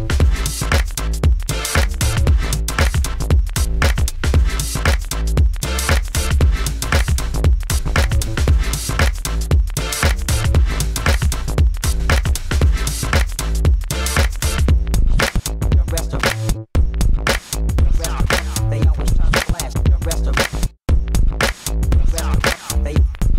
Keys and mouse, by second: 0.1 alt+z, 1.5 g, 1.9 Tab, 2.0 a, 2.1 a, 2.3 ctrl+f, 4.3 middle click, 4.4 Tab, 5.2 Tab, 5.8 click, 6.4 e, 6.7 g, 7.3 g, 8.7 s, 9.7 g, 10.5 middle click, 10.9 KP_1, 11.5 s, 12.7 s, 13.9-18.1 typing, 18.4 click, 18.9 Tab, 19.3 Tab, 19.5 a, 19.7 ctrl+f, 20.3 Tab, 20.8 Tab, 21.5 ctrl+e, 23.1 ctrl+e.